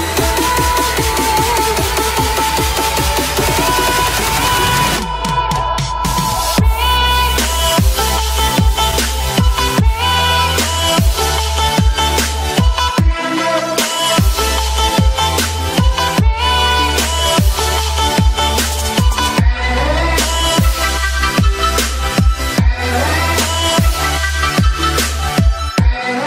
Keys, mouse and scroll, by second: 0.6-6.2 drag, 6.8-11.8 drag, 11.9 click, 13.3 click, 16.0 click, 18.6 click, 21.0 click.